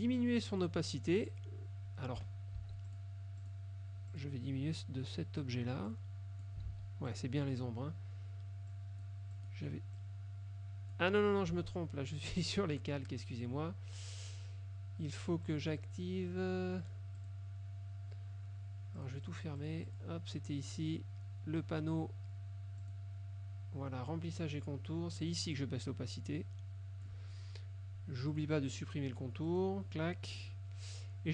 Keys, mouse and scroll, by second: 0.6 click, 2.7 ctrl+shift+z, 3.0 ctrl+shift+click, 3.5 ctrl+shift+click, 4.2 click, 6.0-6.7 drag, 6.8 ctrl+z, 7.2 ctrl+click, 8.8 click, 9.4 click, 10.0 click, 11.6 ctrl+z, 15.6 click, 17.2 click, 19.0 click, 22.9 click, 25.6-27.4 drag, 28.4 click, 29.6 click.